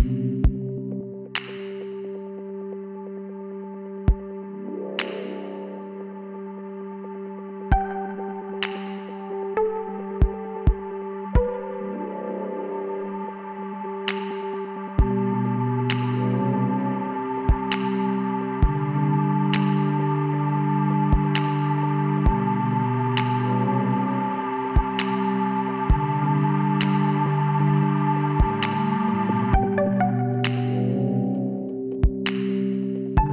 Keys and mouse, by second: 1.9-8.8 drag, 8.8-10.1 middle drag, 11.0-12.1 middle drag, 12.1-14.3 drag, 14.6 click, 14.8-16.2 middle drag, 16.7-18.6 drag, 17.6 ctrl+z, 18.8-19.9 drag, 19.9-21.8 middle drag, 21.8 click, 22.0 x, 23.1 click, 27.3-30.0 drag, 30.0-31.6 middle drag, 31.6-33.3 drag, 32.8-33.3 middle drag.